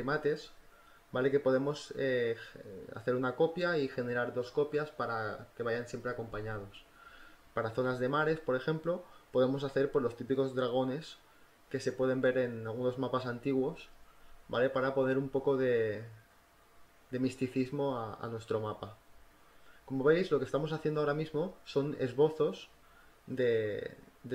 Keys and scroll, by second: 0.1 v, 0.3 ctrl+t, 0.7 Return, 1.4 ctrl+t, 1.7 Return, 2.2 ctrl+t, 2.5 Return, 2.7 ctrl+t, 3.0 Return, 3.2-5.1 typing, 4.6 ctrl+z, 6.6 ctrl+z, 7.6 ctrl+z, 10.2 ], 10.5 [, 13.5 [, 15.0 ctrl+z, 15.2 ctrl+z, 15.7 ctrl+z, 18.3 ctrl+t, 18.3 =, 19.9 ctrl+z, 20.1 ctrl+t, 20.5 Return, 20.7 v, 21.1 Return, 21.2 b.